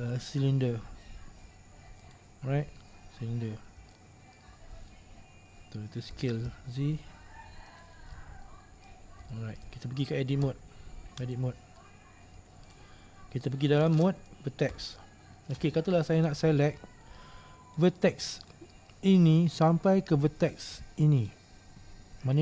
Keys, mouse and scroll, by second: 3.2-4.0 scroll up 2, 4.0-6.3 shift+middle drag, 6.3 s, 8.3-11.9 middle drag, 11.9-12.3 scroll down 2, 12.3 scroll up 2, 12.8 right click, 14.9 1, 15.6-16.1 scroll up 3, 16.1-17.9 scroll down 2, 17.9 right click, 21.3 right click.